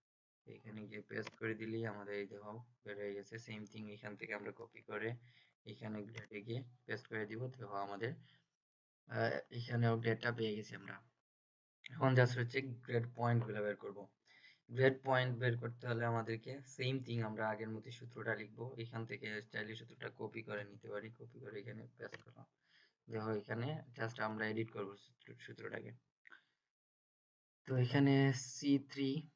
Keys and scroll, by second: 4.5 ctrl+c, 20.5 ctrl+c.